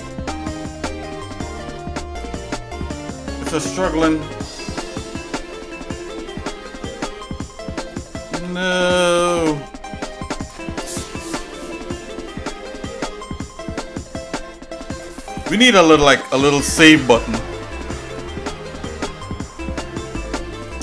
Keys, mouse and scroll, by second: 2.5 middle click.